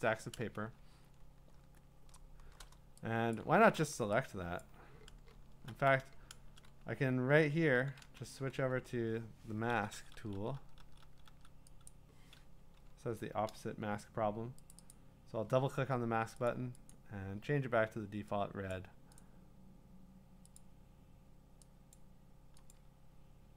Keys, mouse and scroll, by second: 1.0-1.7 super+scroll, 1.9 8, 5.5 click, 5.5-6.4 scroll, 5.5 w, 7.7-11.3 typing, 11.9 click, 13.0 ctrl+z, 14.7 click, 14.9 click, 16.5 click, 16.9 click, 18.7 click, 19.2 click, 20.6 click, 21.9 click, 22.7 click.